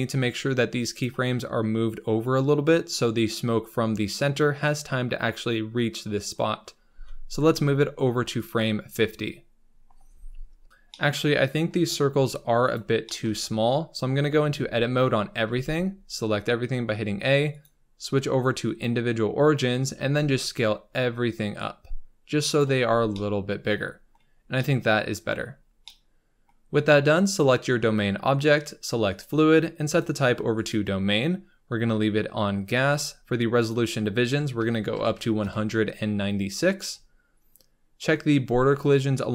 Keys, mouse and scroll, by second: 6.8 g, 7.7 click, 10.5-10.8 scroll down 3, 10.9 middle click, 11.7-12.7 scroll up 10, 12.7 shift+click, 13.0-14.0 shift+middle drag, 14.0-14.3 scroll up 2, 14.3 Tab, 15.4 a, 18.8-19.9 drag, 19.9 s, 22.7 Tab, 22.8 scroll down 4, 23.1-24.3 middle drag, 24.3 scroll down 4, 24.5-25.5 middle drag, 25.5 scroll down 4, 25.8-27.3 middle drag, 27.3 click, 29.1-32.7 drag, 32.7-33.1 scroll up 3, 35.5-38.8 drag.